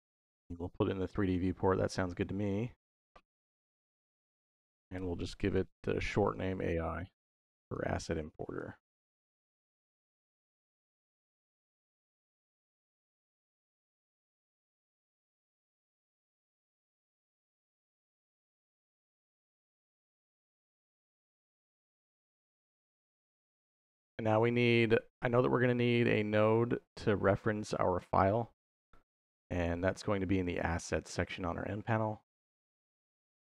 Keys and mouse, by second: 0.0 middle click, 2.6-7.3 drag, 7.5-8.9 drag, 9.0-11.1 ctrl+drag, 12.6-17.7 drag, 15.0 s, 20.1 middle click, 21.2 middle click, 21.7 click, 26.4 middle click, 29.7 click.